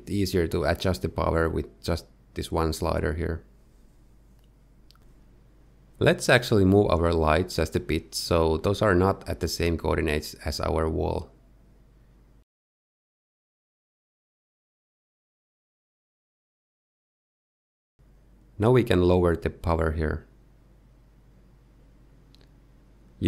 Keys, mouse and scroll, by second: 0.0 alt+d, 0.1-0.5 scroll up 3, 1.4 click, 2.0 middle click, 4.0 click, 6.5 middle click, 6.6 shift+click, 7.0 middle click, 8.0 shift+middle click, 9.0 middle click, 9.0-9.5 scroll up 3, 9.5 middle click, 10.1 middle click, 10.2 middle click, 10.6-11.7 scroll up 1, 11.7 g, 14.3-15.2 scroll down 4, 14.6 middle click, 15.2 shift+middle click, 15.5 middle click, 15.8 z, 17.6 middle click, 18.8 click, 21.2 middle click.